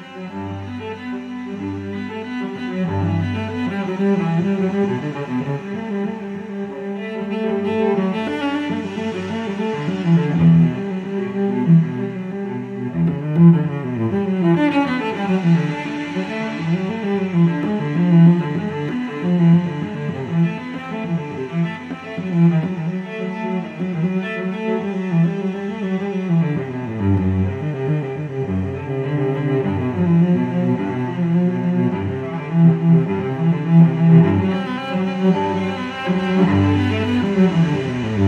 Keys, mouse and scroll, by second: 0.0-2.5 typing, 4.3 click, 5.4 click, 7.0 click, 7.9-13.4 typing, 15.0 click, 16.2 click, 17.3 click, 19.4 click, 21.2-22.5 drag, 23.4-28.5 drag, 29.1-29.4 scroll down 2, 29.7-30.4 scroll up 6, 30.8 scroll down 2, 33.6 click, 37.5 click.